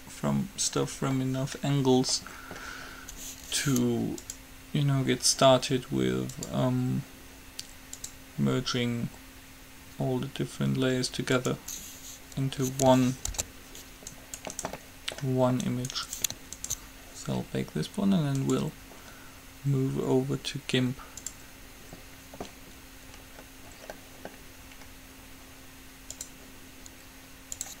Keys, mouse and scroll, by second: 4.4-6.2 drag, 6.5-10.0 drag, 13.5 alt+h, 14.4 right click, 15.0-16.7 middle drag, 18.7-20.4 drag, 21.4-23.2 drag, 23.2-25.9 middle drag, 26.4-27.8 drag.